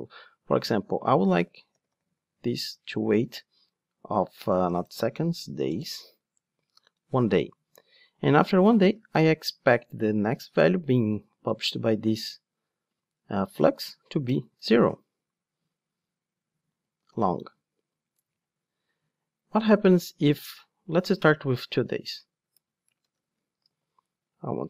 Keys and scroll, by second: 3.0 Return, 23.6 super+d.